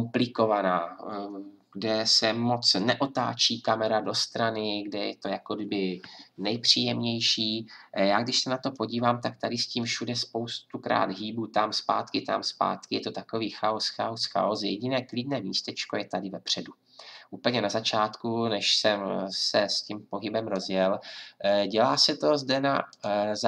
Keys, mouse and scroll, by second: 22.9-23.4 drag.